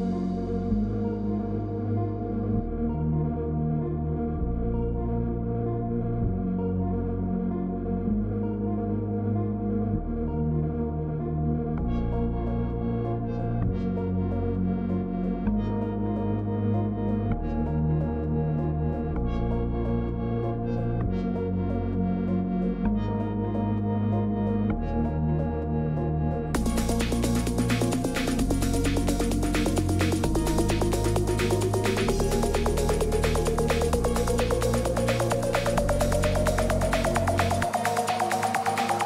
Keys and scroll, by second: 5.1 z, 5.4 z, 5.5 z, 5.5 z, 23.8 ctrl+-, 23.8 ctrl+-, 24.4-24.9 typing.